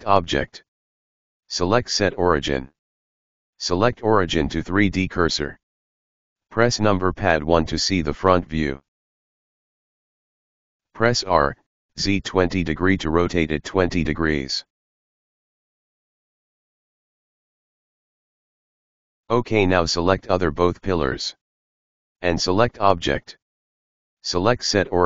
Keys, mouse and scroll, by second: 5.3 r, 8.2 KP_1, 8.8 r, 13.9-16.9 middle drag, 18.5 click, 23.4-25.0 drag.